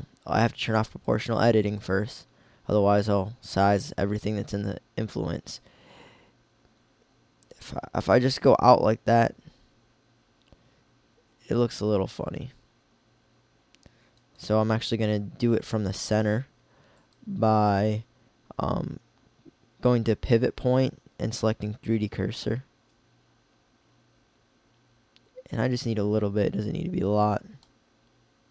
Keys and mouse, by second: 4.4 s, 14.4-16.3 drag, 16.8 click, 22.5 s, 27.8 middle click.